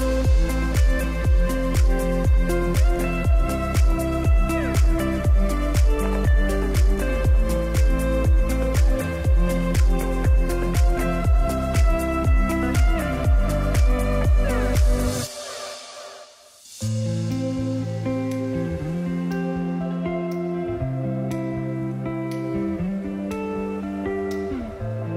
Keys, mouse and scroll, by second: 4.4 click, 6.4-7.4 scroll down 1, 7.5-10.6 drag, 14.0 right click, 15.0 click, 18.8 click, 19.1 space, 22.0 space, 22.8-23.8 drag.